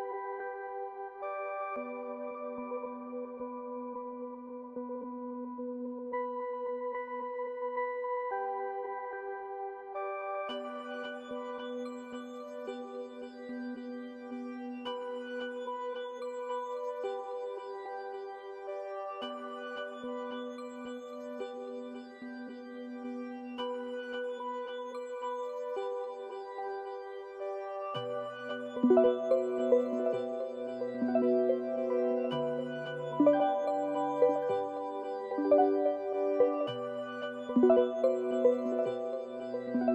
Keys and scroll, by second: 0.0-0.2 typing, 1.2 typing, 2.8-7.8 typing, 9.3-11.8 typing, 21.7 Return.